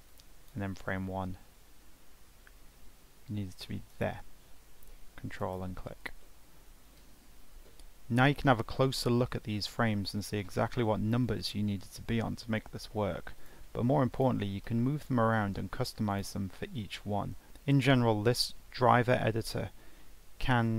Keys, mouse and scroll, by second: 0.1-3.3 drag, 16.1 click, 17.1 g.